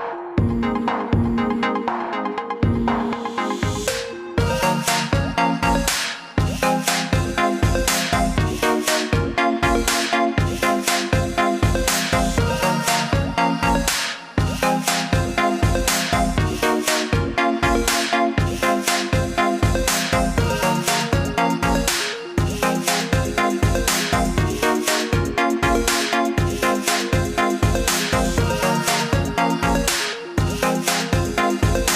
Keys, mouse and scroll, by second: 2.1 scroll up 1, 4.4 click, 10.1 click, 13.8 click, 17.1 click, 21.5 click, 27.5 click, 31.0 click.